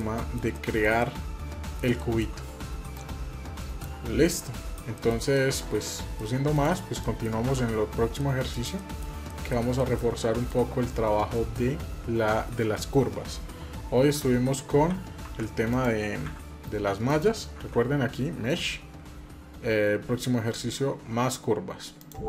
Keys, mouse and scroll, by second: 0.8 middle click, 1.7 shift+middle click, 2.7 click, 4.1 middle click, 4.7 shift+middle drag, 5.1 middle click, 5.6 middle click, 6.3 click, 6.8 middle click, 7.2 Tab, 7.8 scroll down 1, 7.9 middle click, 8.6 shift+middle click, 9.0 middle click, 9.6 middle click, 9.9 shift+middle click, 13.8 a, 15.1 Tab, 15.5 click, 16.0 a, 16.8 click, 17.4 a, 21.7 click.